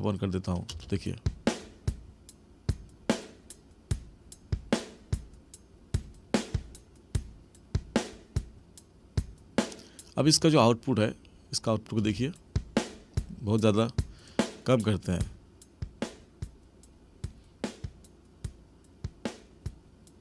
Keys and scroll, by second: 0.7 space, 10.2 space, 12.0 space.